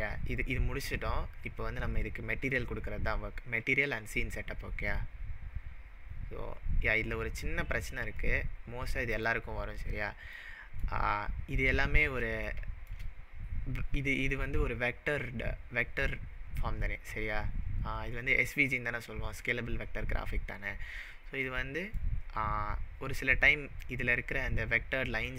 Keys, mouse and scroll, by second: 6.3-7.4 scroll up 4, 7.4-8.1 scroll up 9, 8.3-9.0 middle click, 9.1 click, 9.9-10.3 scroll down 2, 10.5-10.9 middle drag, 11.4-12.2 scroll down 5, 12.5-13.0 shift+middle drag, 14.4-16.3 scroll down 2, 19.8-20.5 scroll down 2, 20.5-21.4 scroll down 4, 21.5-22.0 middle drag, 23.6-24.7 scroll up 8, 25.2 click.